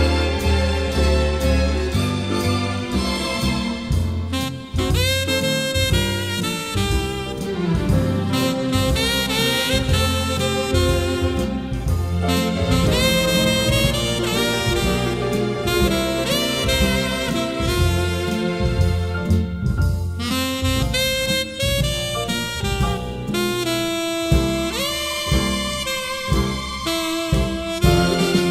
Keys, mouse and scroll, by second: 0.0 click, 0.3-2.1 middle drag, 0.3 scroll, 0.3 scroll, 0.4 scroll, 1.4 scroll, 1.5 scroll, 2.1 click, 2.7 middle click, 3.3 m, 3.6-14.7 drag, 15.4 click, 15.7-17.8 scroll up 11, 17.8-19.3 scroll down 6, 19.3-23.1 middle drag, 19.3-19.9 scroll, 20.3-20.8 scroll, 23.0 scroll, 23.5 scroll, 23.8 scroll down 3, 23.8-25.0 scroll up 14, 25.0-26.9 scroll down 10, 26.9-28.5 middle drag, 26.9-28.2 scroll.